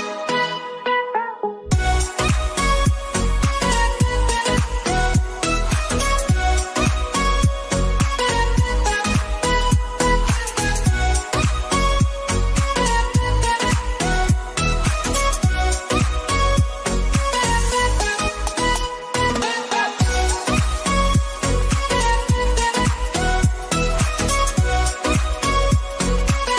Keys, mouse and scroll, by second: 0.0 click, 2.1 click, 4.7 ctrl+x, 6.3 click, 11.7 click, 14.8 ctrl+f, 15.5 click, 18.3 click, 20.5 click, 21.9 click, 23.3 click.